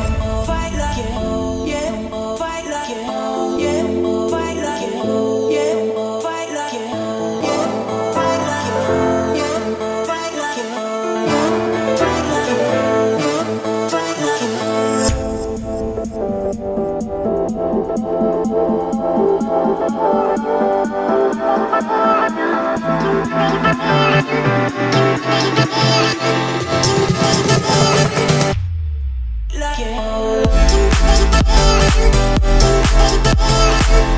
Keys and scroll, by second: 11.4 Escape, 13.8 Escape, 30.1 o, 32.5 Escape.